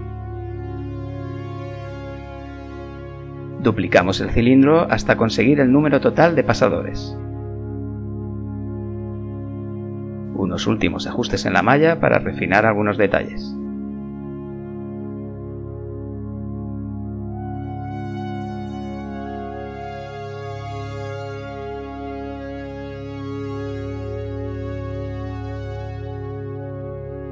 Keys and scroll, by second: 1.9 KP_1, 6.3 shift+d, 9.4 b, 9.7 g, 11.2-12.9 typing, 14.2 g, 15.6 g, 17.4 g, 18.1 g, 19.1 g, 19.5 g, 20.6-23.0 typing.